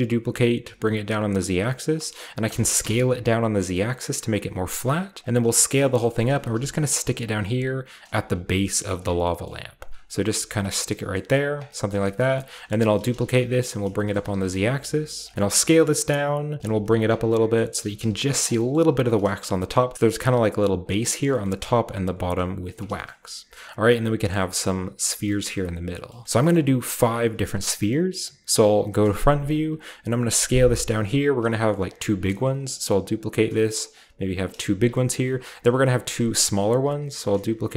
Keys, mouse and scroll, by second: 0.6 z, 1.8 click, 2.4 s, 2.8 z, 5.1 click, 5.2 s, 5.7 click, 5.9 scroll down 1, 6.0-7.5 shift+middle drag, 6.2-7.0 shift+scroll up 1, 6.3-7.0 typing, 6.9 click, 8.0 click, 8.1 typing, 8.9 drag, 9.2-9.5 middle drag, 9.6-10.3 typing, 9.8-10.5 drag, 9.9-11.4 scroll down 1, 10.5 middle click, 11.3-13.2 typing, 11.4 middle drag, 12.0 shift+middle drag, 12.0-12.7 shift+scroll down 1, 12.7-13.2 scroll up 1, 13.7 shift+middle click, 14.1-16.5 shift+scroll up 1, 14.2 middle click, 14.2 typing, 15.1 click, 15.3 ctrl+s, 16.5 click, 16.6-18.7 typing, 17.0 click, 17.2-17.5 scroll down 1, 17.5-18.4 scroll up 1, 18.3 drag, 18.4-20.1 middle drag, 18.5 scroll down 1, 19.1-19.9 scroll down 1, 20.1 typing, 21.4-23.7 shift+scroll up 1, 22.2-22.7 typing, 24.1-24.5 scroll down 1, 25.1-27.2 shift+scroll up 2, 26.6-27.9 shift+middle drag, 27.2-27.9 shift+scroll up 1, 28.9 KP_1, 30.3-32.4 typing, 30.9 click, 31.5 click, 31.8 click, 32.2 click, 33.3 drag, 34.0 g, 34.3 click, 34.9 shift+middle click, 35.2-37.5 typing, 35.7 click, 36.5 click, 36.8 click, 37.2 click.